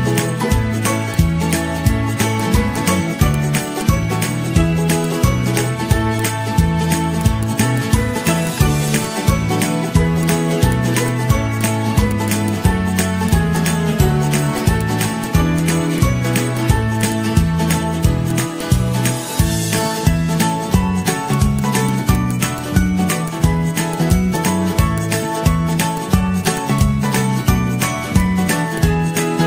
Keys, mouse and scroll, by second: 0.0 ctrl+-, 0.2 ctrl+-, 0.7 ctrl+-, 1.2 ctrl+-, 2.1 z, 6.9 ctrl+d, 7.0 ctrl+d, 7.5 ctrl+d, 8.1 i, 9.6 i, 11.2 i, 12.9 ctrl+-, 17.6 Delete, 17.6 click, 17.8 ctrl+-, 17.9 ctrl+-, 18.2 click, 18.4 ctrl+-, 20.0 ctrl+z, 24.0-24.6 z, 25.2 ctrl+-, 25.5 ctrl+-, 26.0 scroll.